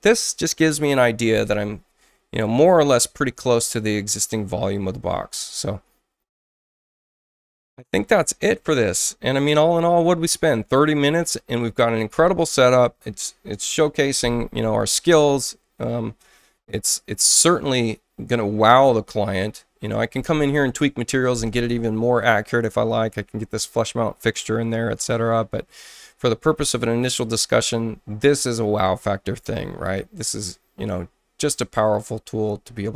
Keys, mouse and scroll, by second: 4.7 click, 6.3 click, 8.5 click, 31.9 click.